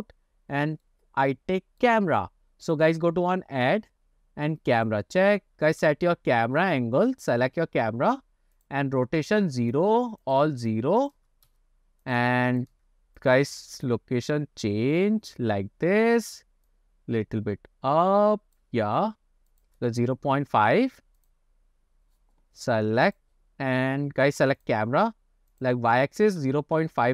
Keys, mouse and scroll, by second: 0.0 scroll up 3, 0.3-0.9 scroll down 2, 0.9-1.8 middle drag, 2.7-5.0 drag, 5.9 ctrl+alt+KP_0, 8.7-9.8 drag, 10.4 click, 11.1 click, 12.2 click, 12.8 KP_0, 13.3 click, 14.4-16.4 drag, 16.8-18.7 drag, 19.6-20.8 drag, 21.2 click, 23.1 click, 24.7 click, 25.6-27.1 drag.